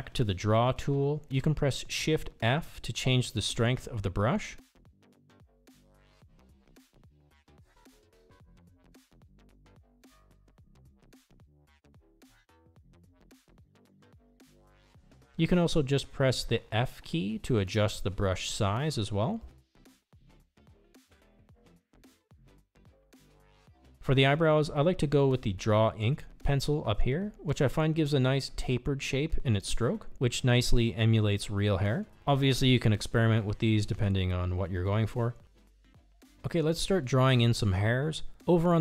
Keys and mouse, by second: 5.4 shift+f, 7.6-9.6 drag, 11.5 ctrl+z, 13.5 shift+f, 17.0 f, 21.2-23.2 drag, 24.6 ctrl+z, 25.4 f, 32.3-38.8 drag.